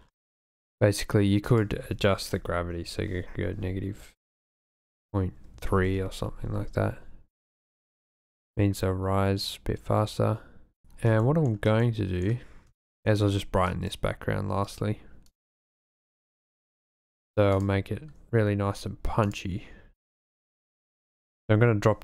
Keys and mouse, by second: 1.6-5.9 drag, 7.4 click, 8.0 space, 11.3 shift+middle click, 11.9 click, 13.0 shift+middle click, 13.7-14.4 drag, 14.7 drag, 15.3 click, 15.8 click, 16.6 click, 17.1 click, 19.2 click, 21.1-22.0 drag.